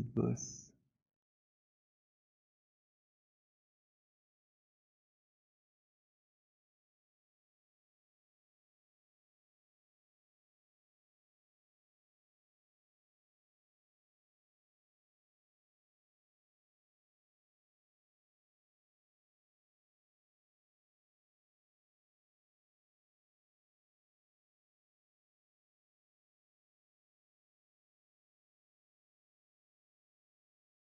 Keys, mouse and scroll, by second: 7.3 alt+click, 8.2 alt+middle click, 8.9 alt+right click, 13.6 alt+click, 14.7 alt+middle click, 17.5 right click, 20.3 click, 20.8 b, 23.6 b, 25.6-26.2 b, 27.0-28.2 b, 28.4 click, 28.4 b.